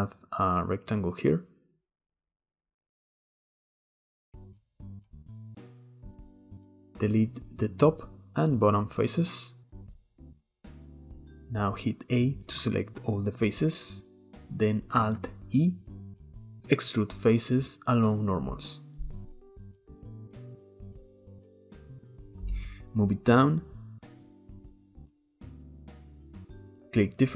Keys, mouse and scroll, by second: 0.1 click, 4.0 middle drag, 4.3 Tab, 4.8 click, 5.4 click, 5.7 middle click, 6.1 click, 6.6 shift+middle click, 7.2 x, 7.9 middle click, 8.5 click, 8.9 x, 10.8-11.3 shift+middle drag, 11.3 a, 12.1 middle click, 12.4-13.4 scroll up 1, 13.4-15.4 scroll up 1, 16.4 alt+e, 20.6 Tab, 21.4-22.3 middle drag, 22.3 click, 26.2-27.3 shift+middle drag.